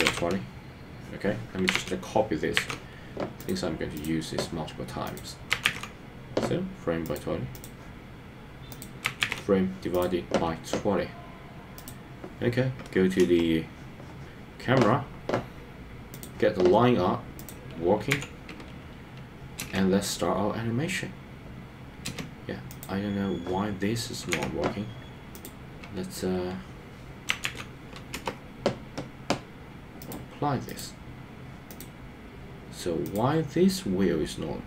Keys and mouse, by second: 5.2-7.1 drag, 8.8-10.0 drag, 13.2 KP_0, 18.2 n, 19.7 space, 22.1 space, 22.7 click, 24.4 n, 25.3-28.3 drag, 30.1 click, 30.7 click, 31.7 click.